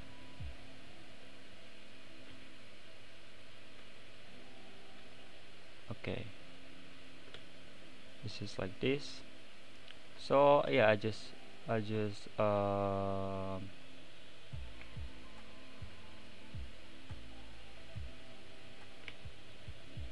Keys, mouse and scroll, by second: 1.8 click, 2.3 x, 3.3 click, 3.8 x, 4.7 click, 5.0 x, 5.6-7.5 middle drag, 7.5 shift+click, 9.0 shift+click, 10.3-11.4 right drag, 10.3 middle click, 11.4 shift+click, 12.0-13.1 right drag, 12.0 middle click, 13.1 shift+click, 14.7 shift+c, 15.7-16.3 scroll up 13, 17.8 `.